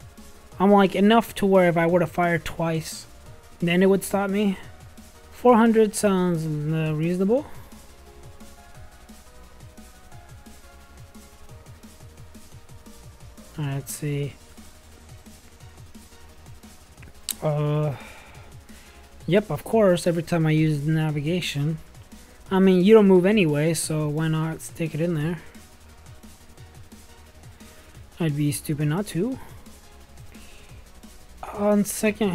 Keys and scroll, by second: 1.7 4, 5.3 0, 6.1 0, 6.7 space, 10.1-11.0 typing.